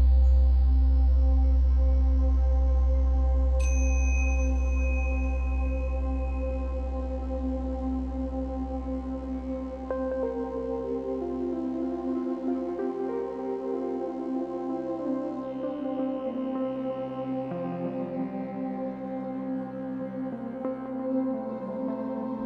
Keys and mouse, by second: 0.6 alt+click, 1.7-2.0 alt+drag, 2.3 alt+shift+click, 3.5 r, 3.8 x, 4.2 9, 4.3 0, 5.1 Return, 6.0 g, 6.4 y, 7.4-10.1 drag, 11.1-12.6 drag, 12.6 0, 14.4 g, 16.1-18.7 drag, 19.8 ctrl+s.